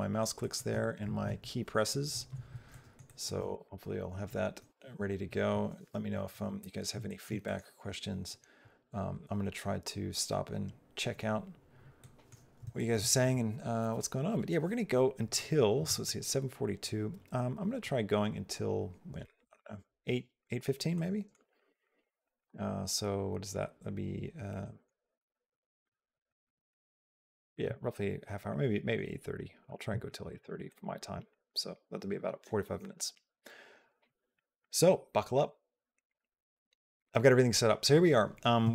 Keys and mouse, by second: 0.2 click, 0.5 f, 0.9 s, 2.5 middle click, 6.4 shift+click, 6.9 middle click, 7.2 shift+middle click, 11.8 middle click, 12.6 shift+middle click, 20.8 middle click, 21.4 shift+middle click, 21.6 middle click, 22.0 shift+middle click, 24.4 middle click, 24.8 shift+middle click, 25.1 middle click, 25.7 middle click, 26.1 middle click, 26.5 shift+middle click, 26.8 middle click, 27.4 shift+middle click, 29.2 click, 29.7 click, 30.1 shift+click, 30.5 click, 31.1 shift+click, 31.1 shift+middle click, 34.2 middle click, 38.5 shift+middle click.